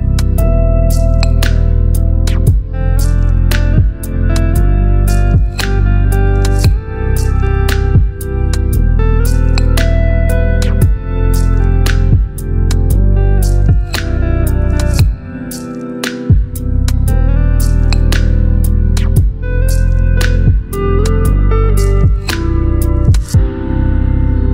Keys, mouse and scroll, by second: 1.2 ctrl+t, 2.6-4.0 drag, 9.7-13.2 alt+drag, 14.2 t, 14.7 click, 16.4 shift+c, 17.4 shift+a, 17.9 shift+s, 19.8 a, 21.7 click.